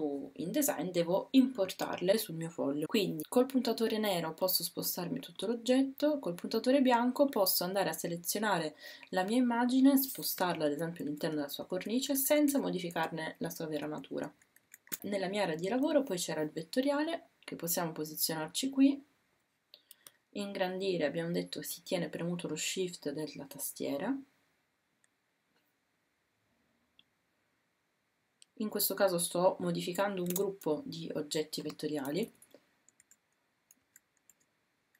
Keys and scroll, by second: 11.1 shift+Left, 11.4 shift+Right, 11.6 shift+Right, 12.1 shift+Up, 14.3 shift+Down.